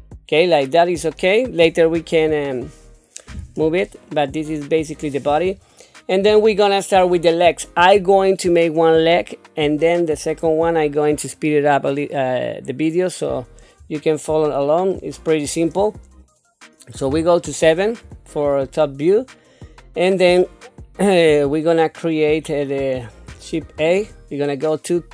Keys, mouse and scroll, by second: 2.5-2.8 scroll down 2, 3.2 middle click, 4.4 middle click, 5.5 scroll up 2, 6.4 shift+middle click, 7.4-8.6 scroll down 1, 14.3 shift+middle click, 17.0 KP_7, 18.4 shift+middle click, 19.5-20.2 scroll down 1, 20.7-21.5 scroll up 1, 21.5-22.3 scroll down 1, 22.3 scroll down 1.